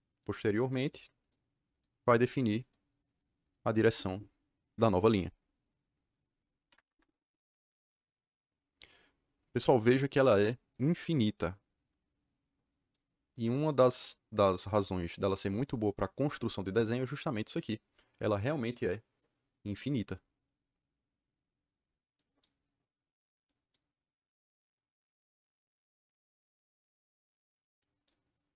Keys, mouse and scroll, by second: 0.1 click, 0.7 click, 1.1 click, 1.6 click, 2.1 click, 2.5 click, 3.0 click, 3.4 click, 3.6 click, 6.6 Escape.